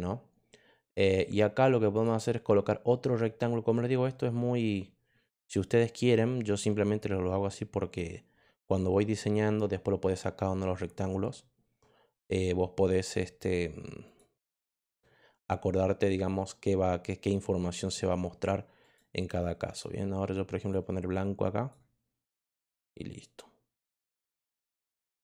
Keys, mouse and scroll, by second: 1.9 click, 4.7-7.9 drag, 13.3 click, 14.0 click, 14.6 click, 18.7 click, 19.6 click, 20.5 click, 21.0-21.6 drag, 23.0 click, 24.2 click, 25.1 click.